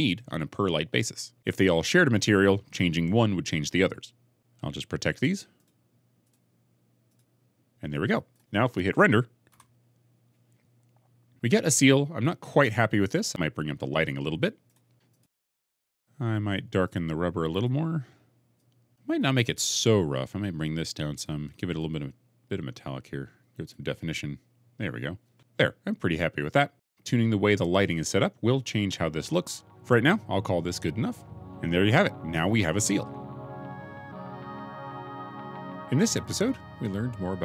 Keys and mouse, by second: 5.4 click, 9.6 F12, 14.5 click, 15.0 click, 15.5 shift+click, 16.7 click, 17.4 click, 19.2-21.3 drag, 21.8 click, 23.1 middle click.